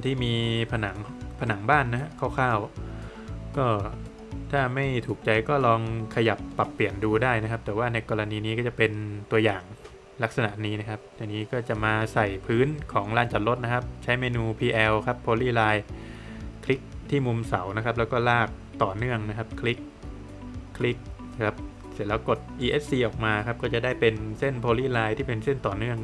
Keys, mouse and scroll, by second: 4.5 middle click, 6.5 middle click, 7.7 middle click, 9.6 scroll up 1, 11.2 middle click, 14.4 space, 15.9 click, 19.5 click, 21.1 space, 21.9 Escape, 22.5 middle click, 23.8 click.